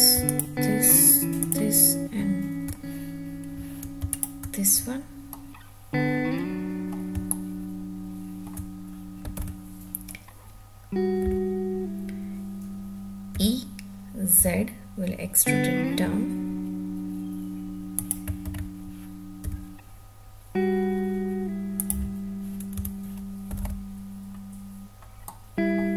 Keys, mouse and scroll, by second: 0.3 shift+click, 1.4 shift+click, 4.1 shift+click, 5.2-6.9 middle drag, 7.2-8.4 shift+middle drag, 9.4 alt+z, 11.3 2, 13.4 e, 14.4 z, 18.0 click, 18.5 ctrl+z, 19.5 e, 21.8 click, 22.8 Tab, 23.6 alt+z, 25.2-25.8 middle drag.